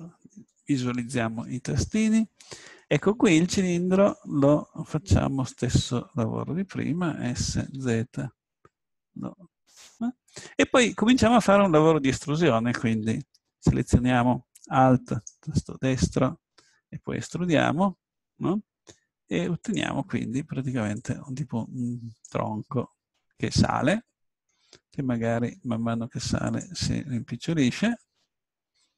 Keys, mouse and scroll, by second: 1.9 middle click, 2.3 middle click, 5.5 Tab, 7.3 s, 9.8 click, 12.9 a, 15.2-16.7 drag, 16.7 middle click, 17.2 e, 19.7-22.8 drag, 22.8-24.7 middle drag, 25.4 s, 26.6 click, 27.3-28.9 drag.